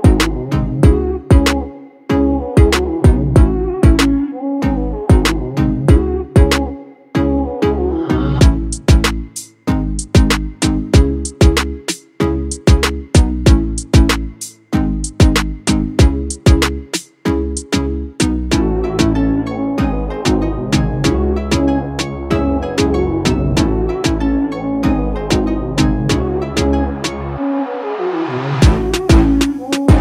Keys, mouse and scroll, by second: 5.6 5, 6.7-7.4 drag, 11.8-13.8 drag, 18.4-19.3 typing, 20.0 Return, 22.4-24.1 drag, 28.2-29.3 typing.